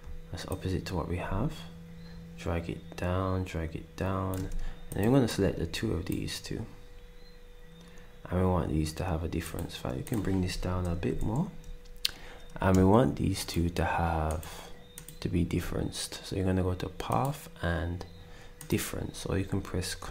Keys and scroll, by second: 11.1 alt+Down.